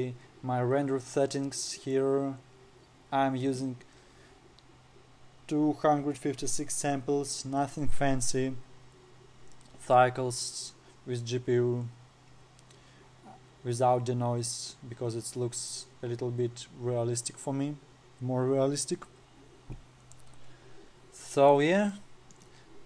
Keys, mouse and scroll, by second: 2.3 click, 12.8-14.7 scroll down 3, 16.1-18.2 scroll down 1, 19.2-19.9 scroll down 2, 20.0-20.5 scroll down 5, 20.5-20.8 scroll up 8, 21.4-22.6 scroll up 9.